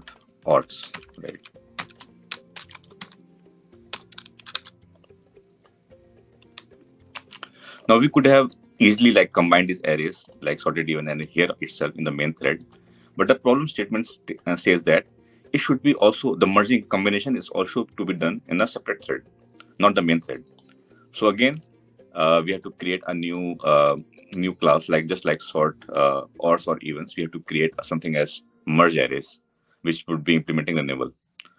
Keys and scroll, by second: 23.7 Tab.